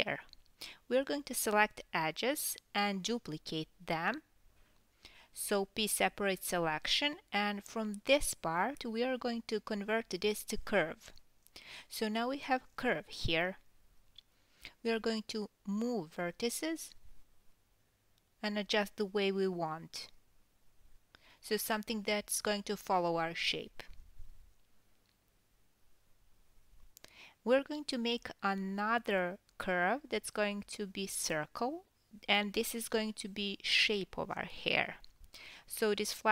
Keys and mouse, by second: 0.4 2, 0.6 drag, 2.1 shift+d, 4.0 p, 4.6 Tab, 4.9-5.7 drag, 6.9-10.0 drag, 9.1 KP_3, 9.6 g, 10.4-15.3 drag, 12.6 Tab, 13.4 KP_1, 15.3-22.3 middle drag, 15.3 g, 16.4 g, 18.5 KP_7, 19.1 g, 20.4 KP_3, 21.2 g, 22.3 click, 22.4-23.8 middle drag, 22.4 g, 23.8 click, 23.9-36.3 middle drag, 26.0 Tab, 26.8 KP_1, 27.6 shift+a, 29.5 s, 30.1 g, 31.0 KP_7, 32.2 Tab, 33.6 g, 34.6-35.1 drag, 35.2 s, 36.0 g.